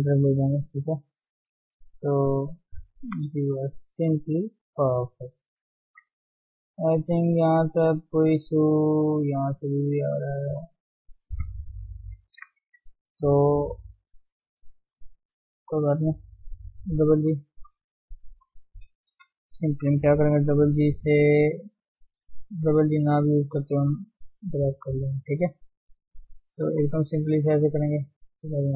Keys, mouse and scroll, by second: 0.8 click, 2.3 shift+click, 3.1 g, 4.0 scroll down 1, 4.0 middle click, 4.9-5.3 scroll down 3, 5.3 Tab, 6.0 ctrl+1, 6.5-9.3 middle drag, 9.3 Tab, 9.4-10.8 scroll up 1, 10.8 Tab, 12.0 ctrl+0, 12.6 Tab, 13.2-15.6 shift+middle drag, 15.6 click, 16.6 g, 17.7 click, 18.7 ctrl+KP_1, 19.3-19.7 scroll down 2, 20.4 g, 21.3 click, 21.5 g, 22.3 click, 22.4 g, 23.2 click, 23.4 g, 24.0 click, 24.2 g, 25.0 click, 25.3 g, 26.0 click, 26.2 g, 27.5 click, 28.1 click, 28.3 g.